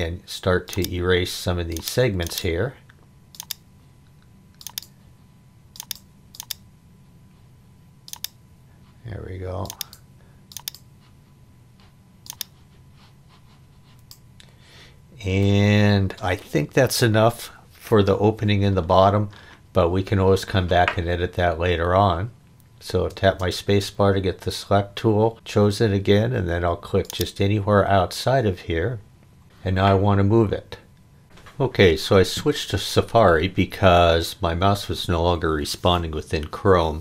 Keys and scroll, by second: 23.1 space, 29.4 m.